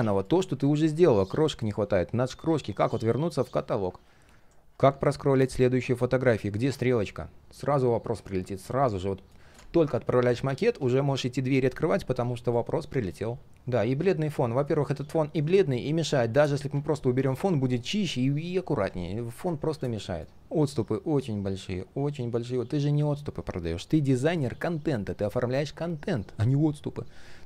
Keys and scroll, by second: 3.3 ctrl+z, 6.6 ctrl+z, 19.5 ctrl+z.